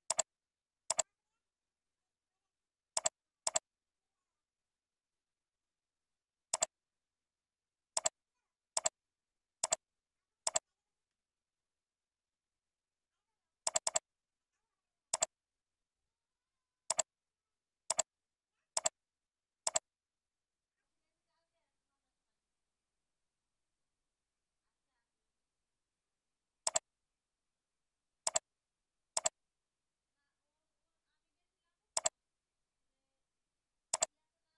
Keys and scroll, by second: 0.5 ctrl+v, 9.4 ctrl+c, 11.9 ctrl+v, 12.7 ctrl+e, 14.3 ctrl+b, 22.6 ctrl+Left.